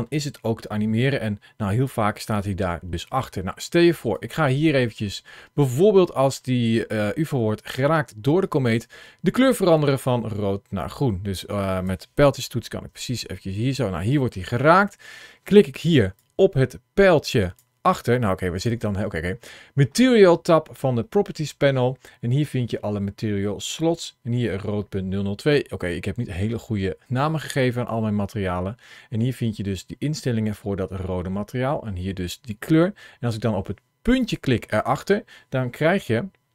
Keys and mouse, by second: 4.0-11.7 drag, 12.2 Right, 12.5 Right, 12.7 Right, 13.1 Right, 15.9 ctrl+shift+a, 34.1 click.